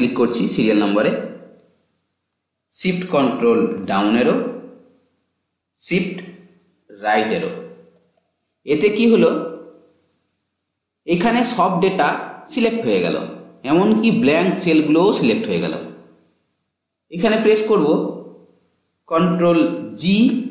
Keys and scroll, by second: 2.7 ctrl+shift+Down, 6.0 shift+Right.